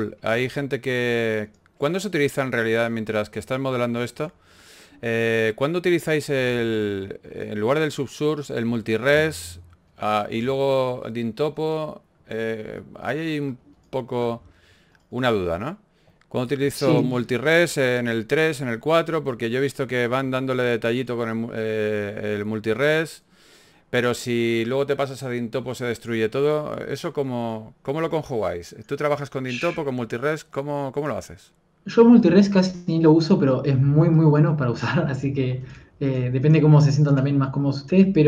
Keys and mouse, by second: 1.3-2.3 drag, 2.3 f, 5.4 f, 8.3-10.3 drag, 9.7 KP_1, 10.3 f, 11.5 f, 14.1 f, 16.6 KP_1, 16.8 a, 18.2 shift+d, 19.2 alt+g, 20.8 g, 27.3 g, 28.5 s, 35.3-37.1 typing.